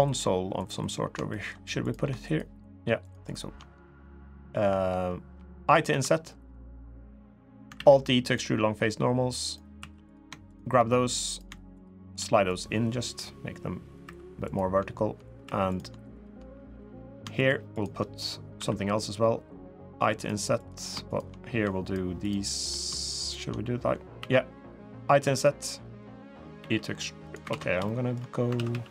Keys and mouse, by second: 0.3 click, 1.1 shift+click, 1.6 click, 2.0 shift+click, 2.8 shift+click, 5.6 i, 7.5 alt+e, 9.5 2, 9.8 click, 10.2 shift+click, 11.5 shift+click, 12.3-13.7 drag, 13.8 3, 14.2 click, 15.2 3, 15.4 click, 15.9 shift+click, 16.6 click, 17.5 shift+click, 18.3 i, 20.9 shift+click, 21.6 shift+click, 23.9 i, 26.3 e, 27.3 ctrl+z, 27.6 shift+click, 28.3 ctrl+z, 28.5 ctrl+z.